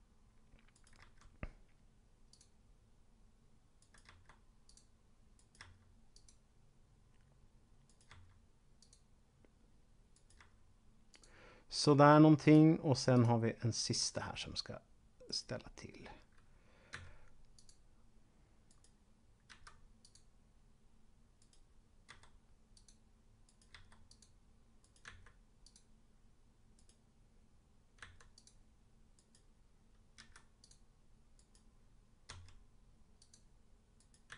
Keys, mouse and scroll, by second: 0.7 right click, 1.0 g, 2.2 click, 3.7 right click, 4.0 g, 4.5 click, 5.4 right click, 6.0 click, 7.9 right click, 8.7 click, 10.0 right click, 10.4 g, 11.0 click, 12.4 click, 15.2 right click, 16.9 s, 17.5 click, 18.7 right click, 19.5 v, 20.0 click, 21.4 right click, 22.0 g, 22.7 click, 23.4 right click, 23.7 g, 24.1 click, 24.7 right click, 25.0 s, 25.6 click, 26.7 right click, 28.0 s, 28.2 click, 29.0 right click, 30.2 v, 30.5 click, 31.2 right click, 32.2 g, 33.2 click, 34.0 right click, 34.2 s.